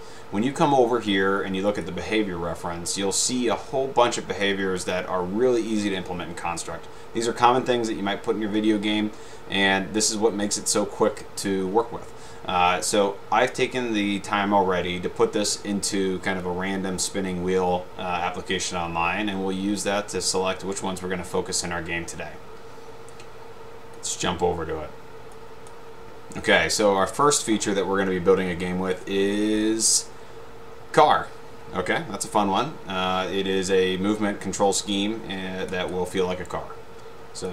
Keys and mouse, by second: 1.4 middle click, 1.8 click, 24.2 click, 35.9 click.